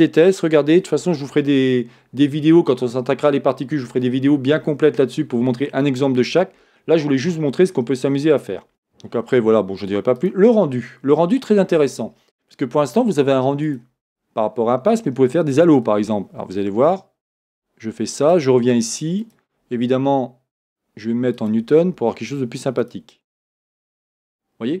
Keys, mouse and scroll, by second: 0.4-4.5 drag, 7.7 scroll down 1, 10.2-17.6 drag, 10.7-11.2 scroll down 1, 18.2-19.6 drag, 20.6-24.8 drag.